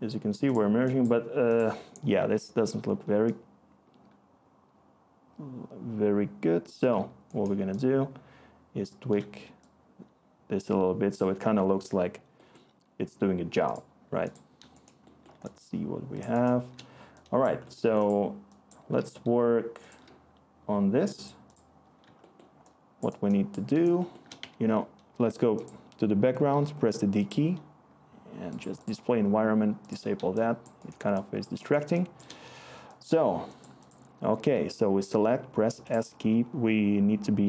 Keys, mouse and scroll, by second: 18.9-19.9 typing, 21.7 e, 24.3-25.0 d, 34.3 s.